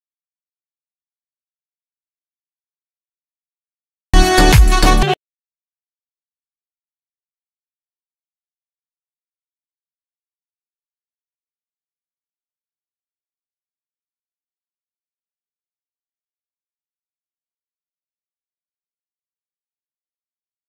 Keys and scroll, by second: 0.3 ctrl+g, 16.1 ctrl+d, 16.6 ctrl+d, 17.3 ctrl+d, 19.9 s.